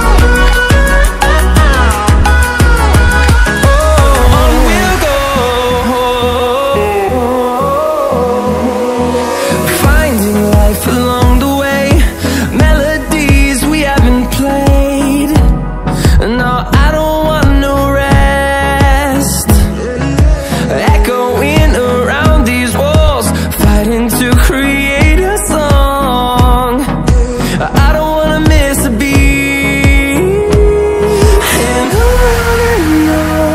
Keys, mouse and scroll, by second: 0.6 click, 2.2-4.0 ctrl+alt+scroll down 2, 4.1-11.0 drag, 11.4 ctrl+alt+scroll up 1, 12.9 click, 15.6 click, 24.3 ctrl+w, 26.3 ctrl+w, 26.9-32.0 drag, 32.8 a, 32.9 a, 33.0 a.